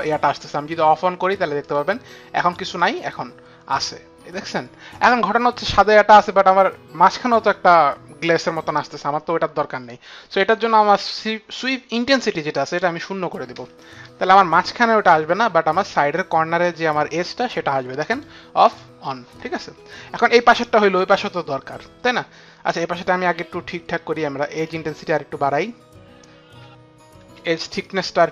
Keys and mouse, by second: 1.5 click, 2.6 click, 12.7 click, 13.5 KP_0, 13.8 Return, 18.1 click, 18.6 click, 24.6 click, 27.8 F9, 27.8 click.